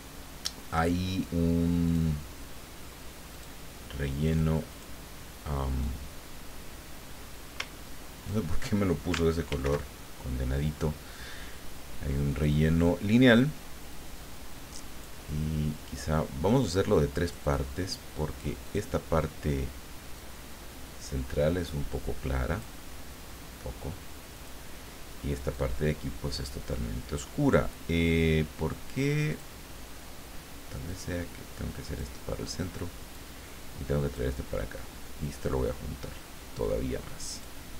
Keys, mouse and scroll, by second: 1.8 click, 3.3 click, 4.2 click, 4.7 click, 5.8-8.6 drag, 9.5 ctrl+shift+f, 12.3 click, 13.9-15.3 drag, 17.2 click, 18.6 click, 20.1-22.8 drag, 24.3 click, 25.5-27.0 drag, 29.3 click, 30.9-32.1 drag, 33.1-34.3 drag, 35.2-37.6 drag.